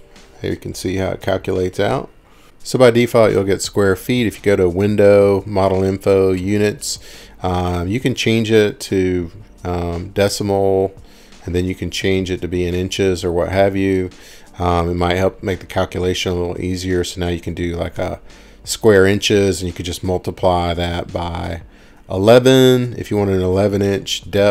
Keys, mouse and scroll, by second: 7.0 click, 8.0 click, 10.0 click, 11.1 click, 14.4 click, 15.3 right click, 17.7 click, 17.9 ctrl+shift+r, 17.9 click.